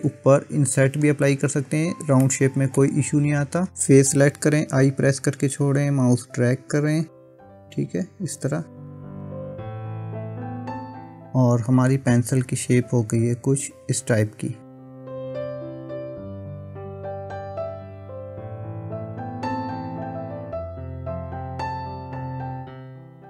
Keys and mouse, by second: 0.7 middle click, 1.8 click, 2.3 middle click, 4.7 i, 6.4 i, 7.3 i, 8.3 i, 10.0-11.9 middle drag, 13.3 Tab, 16.6-17.8 middle drag, 22.9 click.